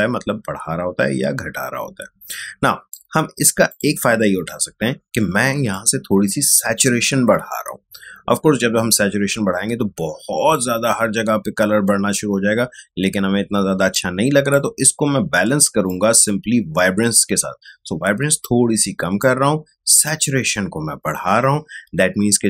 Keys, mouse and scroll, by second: 3.6-13.0 drag, 13.9-22.4 drag.